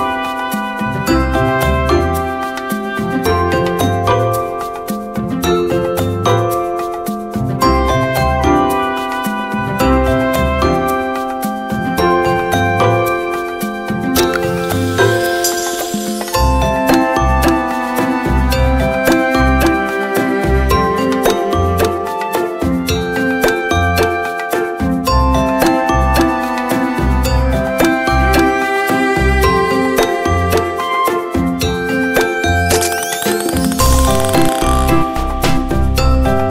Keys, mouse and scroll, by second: 1.0 click, 5.7 right click, 7.3 click, 7.8-8.2 scroll up 1, 8.2-8.8 scroll down 1, 10.5 click, 12.7-13.2 scroll up 1, 13.4 click, 16.8-17.4 scroll up 1, 18.0 click, 18.4-18.8 scroll down 1, 19.7 space, 19.8 click, 20.2 space, 22.5 click, 36.2-36.5 scroll down 1.